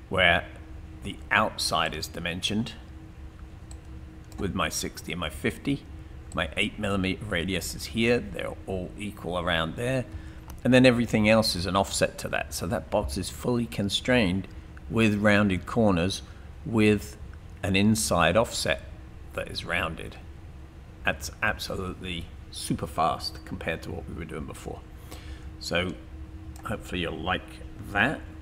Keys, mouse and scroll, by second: 3.7 click, 25.2 click, 28.3 Delete.